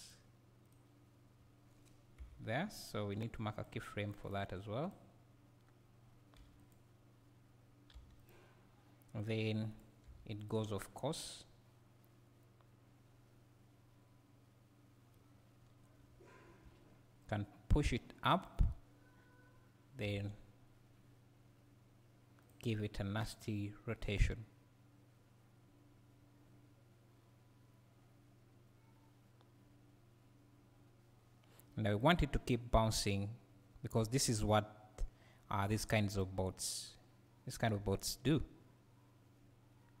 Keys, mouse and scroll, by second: 0.1 click, 2.2 Down, 3.6-4.9 drag, 6.4 g, 8.3 click, 9.2 click, 9.7 click, 10.5 x, 11.0-17.7 right drag, 16.1 `, 16.9-17.7 scroll up 2, 17.7-22.5 drag, 20.1 r, 22.4 r, 23.4-40.0 right drag.